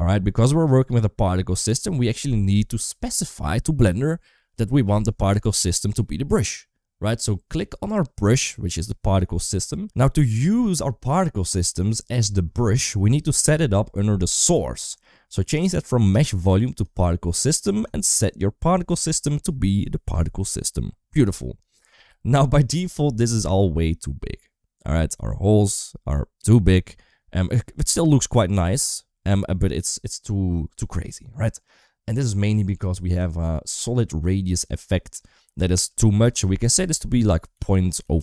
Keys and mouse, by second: 8.0 click, 9.7 space, 16.0 click, 17.6-19.0 drag, 23.3 space, 25.5 space, 35.7-38.2 drag.